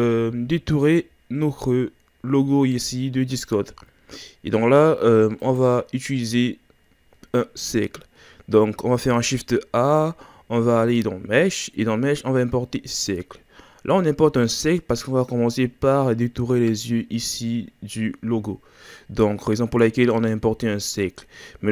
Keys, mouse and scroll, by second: 0.6-3.5 scroll up 1, 5.4 click, 9.0 shift+a.